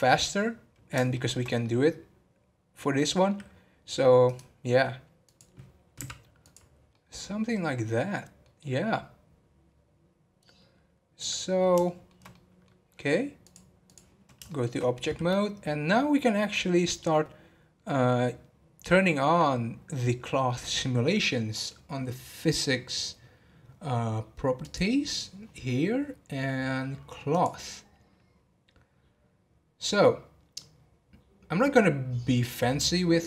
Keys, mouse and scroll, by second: 1.1-13.6 shift+middle drag, 13.6 click, 14.4-20.1 shift+middle drag, 27.4-33.2 drag.